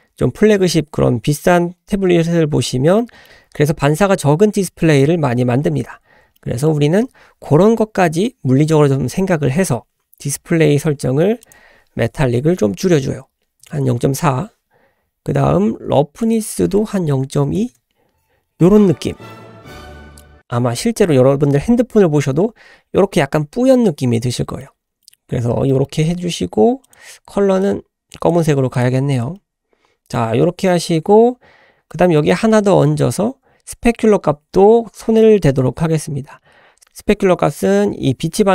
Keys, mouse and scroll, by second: 2.5-3.0 scroll up 1, 3.0-3.3 middle drag, 4.3-4.7 middle drag, 5.0-5.7 scroll up 2, 5.8 scroll down 1, 6.4 shift+middle click, 11.4-14.6 drag, 16.2-18.5 drag, 20.2-22.4 middle drag, 24.6 middle click, 25.2-25.6 scroll up 1, 25.7 shift+middle click, 26.8 click, 28.7 drag, 29.0-29.4 scroll down 1, 29.4-30.1 middle drag, 30.4-30.9 scroll up 1, 30.9-31.6 scroll up 1, 31.6-31.9 scroll down 1, 31.9 middle click, 36.8 click.